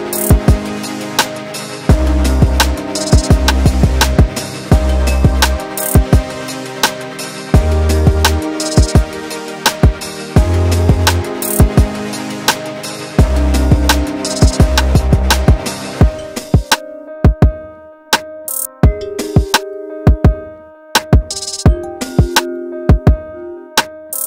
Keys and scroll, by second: 4.0 4, 10.5 F1, 10.6 F2, 13.7 1, 15.5 4.